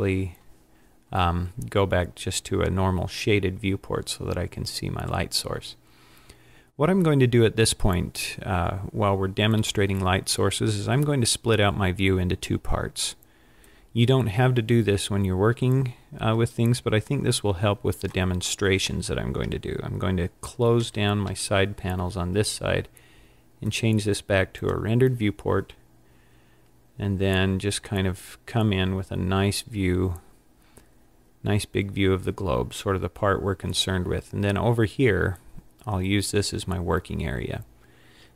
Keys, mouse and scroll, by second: 3.2-5.2 scroll down 5, 13.7 click, 20.8 n, 21.3 t, 23.7 click, 26.6-27.2 scroll up 5, 27.7-28.0 scroll up 3, 28.8 scroll down 1, 29.6 scroll up 1, 30.5 scroll up 1.